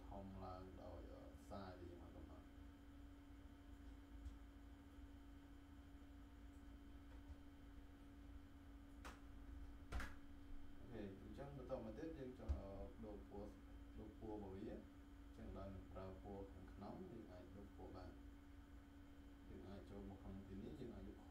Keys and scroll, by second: 9.8 Return.